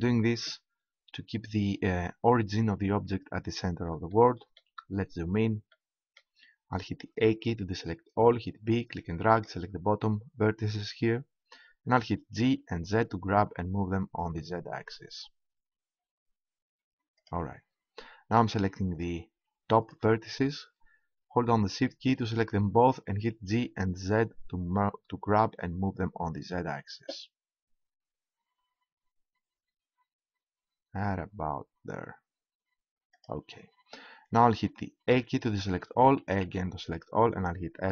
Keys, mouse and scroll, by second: 4.1 click, 7.1 a, 8.2 b, 11.8 g, 18.9-21.5 drag, 23.2 g, 33.2-35.1 drag, 35.1 a, 36.4 a, 37.6 s.